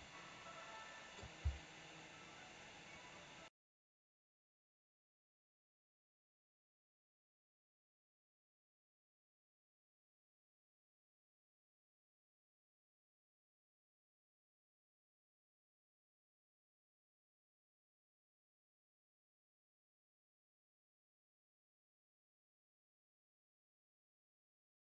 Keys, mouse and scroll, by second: 0.0-1.1 middle drag, 3.0 shift+d, 4.0 click, 9.4-10.4 middle drag, 11.7-12.8 drag, 14.4 scroll up 1, 14.6 middle click, 15.2-16.5 middle drag, 17.1 scroll up 1, 17.2-18.4 middle drag, 19.1-22.6 middle drag, 24.3 click.